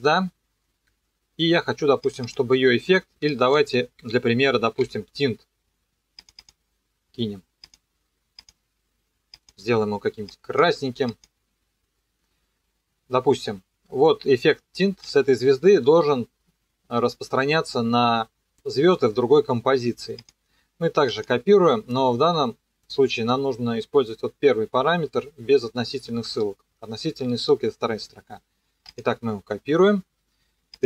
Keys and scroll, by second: 3.8-5.3 typing.